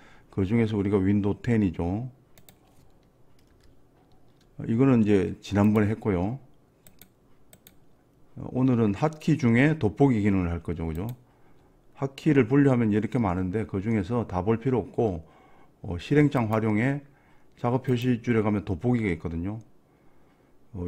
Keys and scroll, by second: 3.6 alt+Down.